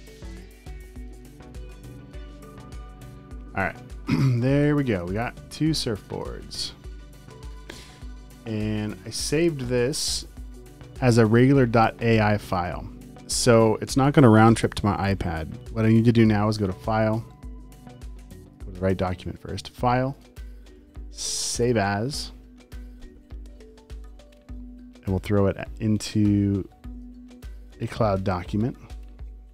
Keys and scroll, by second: 0.5 space, 1.1 alt+super+space, 1.9 space, 3.0 super+;, 3.1 v, 3.5 space, 4.4 super+s, 4.7 space, 5.3 alt+super+space, 5.9 space, 6.4 alt+super+space, 7.1 space, 7.4 v.